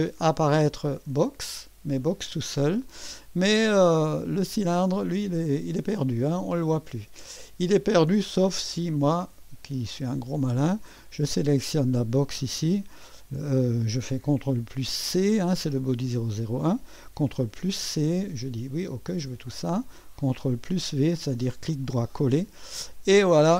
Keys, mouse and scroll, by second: 1.0 space, 2.7 space, 4.5 click, 5.1 space, 5.8 space, 6.1 click, 6.4 space, 6.9 space, 8.1-10.9 drag, 8.2 space, 11.3-13.2 drag, 17.4 ctrl+c, 19.2 click, 20.7 ctrl+v, 23.3 click.